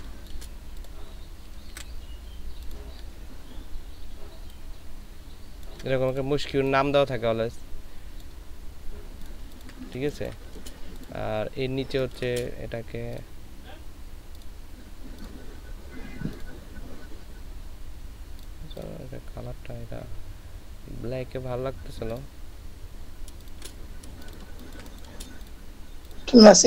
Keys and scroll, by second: 1.7 ctrl+v, 9.4 ctrl+space, 10.0 ctrl+space, 11.9 ctrl+space, 23.4 ctrl+space, 24.1 ctrl+space.